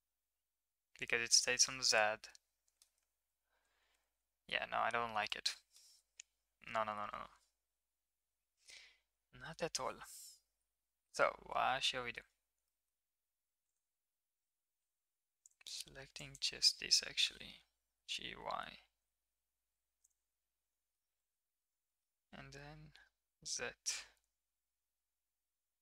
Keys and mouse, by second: 3.0 ctrl+z, 3.2 ctrl+z, 3.6 ctrl+z, 3.9 ctrl+z, 4.1 ctrl+z, 4.5 ctrl+z, 5.3-5.8 middle drag, 8.5-9.5 middle drag, 11.0 alt+h, 11.7 middle click, 12.6 middle drag, 15.4 drag, 16.2 click, 17.9 g, 20.5 middle click, 21.2 shift+middle click, 21.9 middle click, 22.2 g.